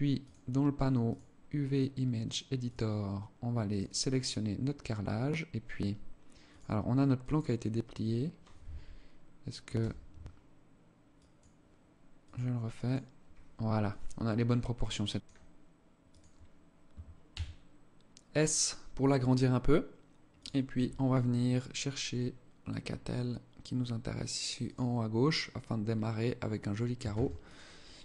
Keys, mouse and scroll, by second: 6.6 click, 9.0 u.